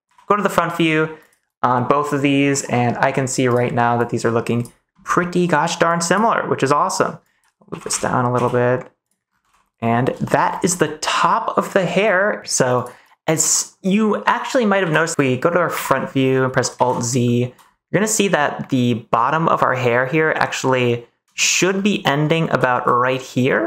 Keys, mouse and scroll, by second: 0.0 KP_1, 7.6 g, 7.8 x, 8.3 z, 9.0 click, 9.4 ctrl+s, 9.5 middle click, 10.2 shift+middle click, 10.8 scroll up 1, 10.9 middle click, 13.3 middle click, 14.7 KP_1, 15.1 middle click, 15.7 KP_1, 16.7 alt+z, 17.2 shift+middle click, 19.6 Tab, 20.2 Tab, 21.3 shift+middle click, 22.6 shift+middle click.